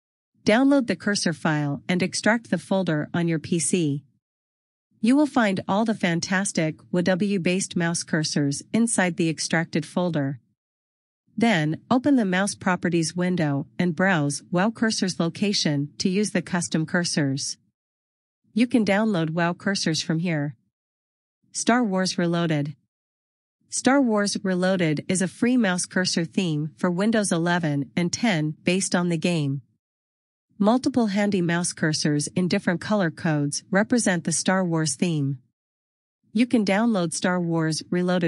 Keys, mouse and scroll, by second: 23.2 click.